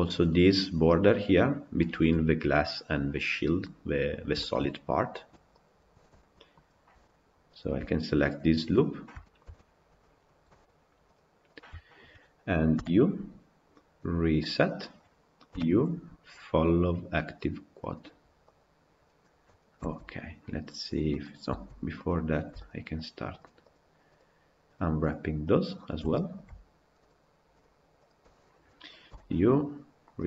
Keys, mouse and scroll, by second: 2.9-3.4 scroll down 4, 3.4-4.0 middle drag, 4.0 scroll down 1, 4.2-4.8 shift+middle drag, 4.8 scroll down 2, 4.9 scroll up 1, 5.5 click, 5.9 Tab, 6.1-7.4 middle drag, 7.4 alt+click, 8.8 scroll up 1, 9.0-11.0 shift+middle drag, 11.0 shift+click, 11.4 shift+click, 14.6 u, 19.8 Tab, 19.9 scroll down 1, 20.9 middle click, 21.5 Tab, 21.8 click, 22.8 shift+click, 23.4 shift+click, 24.8 shift+click, 25.6 shift+click, 25.9 middle click, 26.9 shift+click, 27.4 shift+click, 27.9 shift+click.